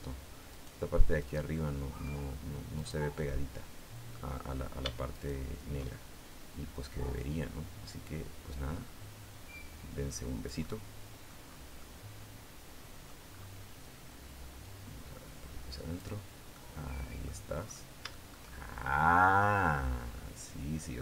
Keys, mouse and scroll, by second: 0.3 right click, 1.0 right click, 1.3 middle click, 1.7 scroll up 1, 2.6 right click, 3.0-4.1 middle drag, 5.0 shift+right click, 7.0-11.2 drag, 11.2-11.6 scroll down 1, 11.6-13.0 middle drag, 13.0-13.4 scroll up 1, 14.4-16.0 drag, 16.1 scroll down 1, 16.3 middle click, 17.4-17.9 scroll up 1, 17.9-19.3 shift+middle drag, 20.2-21.0 drag.